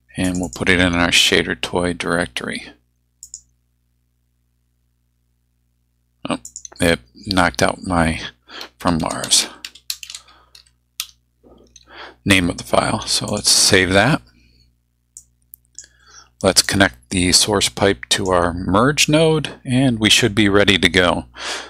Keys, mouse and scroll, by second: 0.2 click, 3.2 click, 6.4 click, 8.8-11.5 typing, 13.3 click, 15.2-16.0 drag, 16.6-18.5 drag.